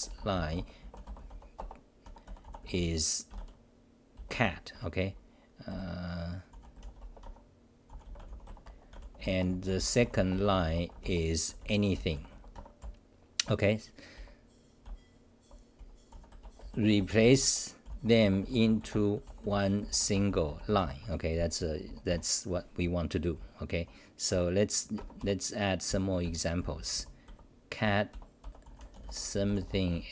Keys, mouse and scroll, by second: 2.0-2.9 typing, 4.7 Home, 5.7 f, 6.5 u, 7.2 Home, 7.9 u, 12.5 Home, 12.8-16.1 typing, 21.0 Home, 21.6 t, 24.3-29.1 typing, 24.9 Home.